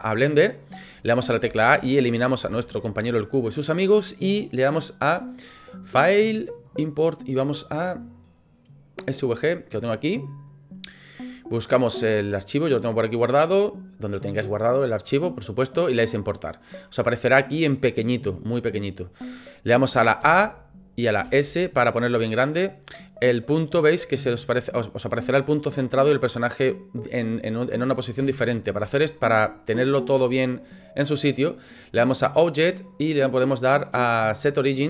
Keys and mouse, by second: 1.5 a, 2.4 Delete, 5.7-11.5 drag, 18.3-19.2 middle drag, 20.2 a, 21.2 s, 32.0-34.8 drag.